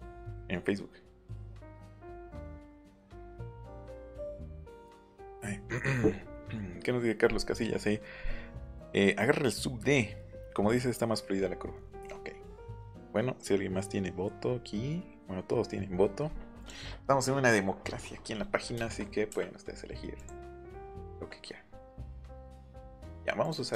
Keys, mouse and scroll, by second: 11.2-11.7 scroll down 2, 11.7 scroll up 2, 16.5 click, 17.7 scroll down 1, 18.3 middle click, 18.7 shift+middle click, 19.5-20.4 scroll up 3, 20.1 click, 20.6 shift+middle click, 23.4 click.